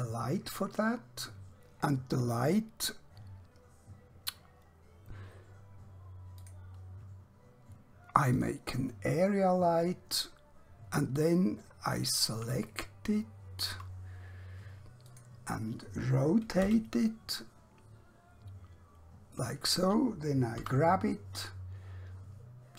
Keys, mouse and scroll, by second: 6.5 click, 11.1 scroll down 1, 12.7 shift+middle click, 15.1 click, 16.7 r, 19.4 click, 20.6 g.